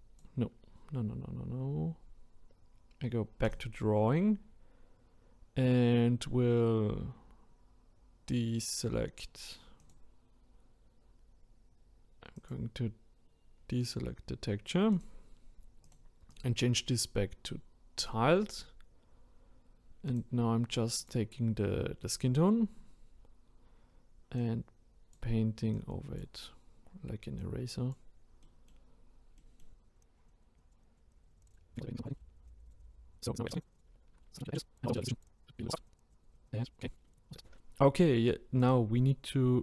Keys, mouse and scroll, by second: 0.7-3.1 scroll down 1, 3.4-6.6 drag, 9.8 click, 12.3 click, 13.5 scroll down 1, 14.9-15.9 drag, 16.3-19.3 drag, 20.0 click, 24.3-28.4 drag, 28.4-28.9 middle drag, 28.9-29.3 scroll up 1, 29.3 middle click, 29.7-31.5 drag, 31.5 middle click, 31.7-32.3 scroll down 2, 31.9 click, 32.3-33.4 drag, 33.4 middle click, 33.5 drag, 33.8 middle click, 34.0 ctrl+z, 34.1 ctrl+z, 34.2 middle drag, 34.2 scroll up 2, 34.4-34.7 drag, 34.9-36.8 drag, 36.8 scroll down 1, 36.9 middle click, 37.1 click, 37.3 middle click, 37.6 scroll up 3, 38.6-39.6 drag.